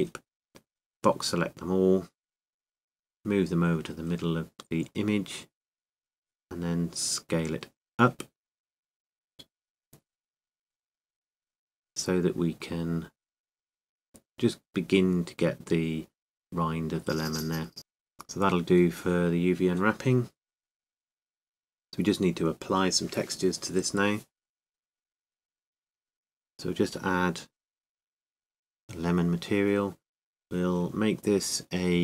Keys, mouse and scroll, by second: 0.9-2.8 drag, 0.9 a, 3.8 g, 20.1 Tab, 21.5-24.7 middle drag, 26.9-32.0 drag.